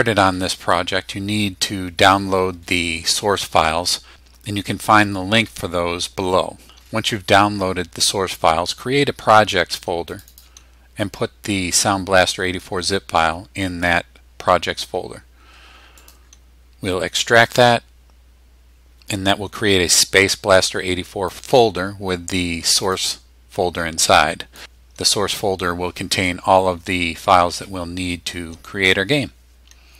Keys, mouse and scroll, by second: 10.1 click, 16.0 middle click, 17.4 click, 21.3 click, 22.8 click, 24.5 click.